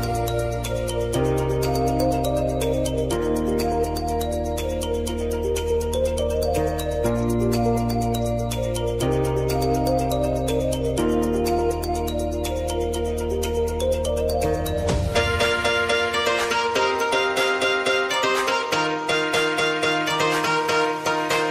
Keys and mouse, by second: 0.1-2.3 drag, 4.4 Return, 5.1-7.0 drag, 7.0 ctrl+alt+Home, 7.9 ctrl+z, 10.5 click, 12.4 ctrl+alt+Home, 13.8 click, 18.4 s, 19.2 click, 19.7-21.0 typing.